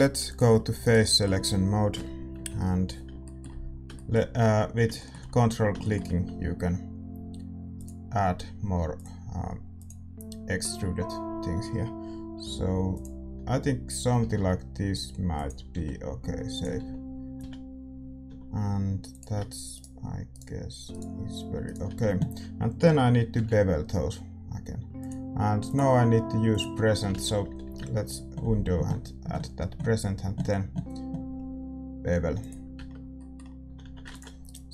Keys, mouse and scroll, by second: 0.2-1.9 drag, 0.8-5.1 right drag, 1.0-7.8 middle drag, 1.9 KP_1, 2.3 KP_3, 7.8-15.7 drag, 14.1 s, 15.7-18.2 typing, 19.0-20.8 drag, 19.7-24.9 right drag, 23.3 ctrl+b, 26.5-27.6 drag, 27.1 ctrl+z, 27.6 ctrl+b, 32.7 Tab, 32.8-34.4 middle drag, 33.6 a, 33.8 a, 34.4 ctrl+s, 34.4-34.7 right drag.